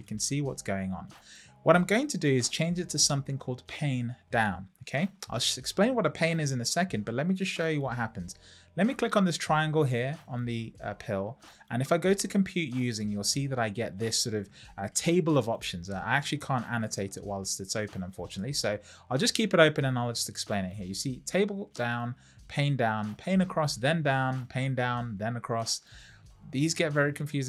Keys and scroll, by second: 16.7 Escape.